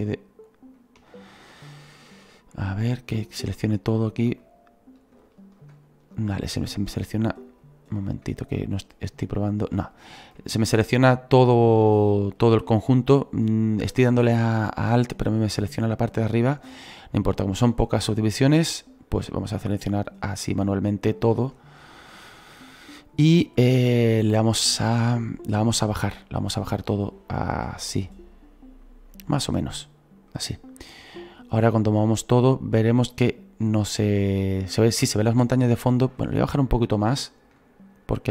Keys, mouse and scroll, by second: 12.6-22.2 shift+right drag, 22.6-26.8 shift+right drag, 26.8-30.3 drag, 31.6-34.6 drag, 38.1 click.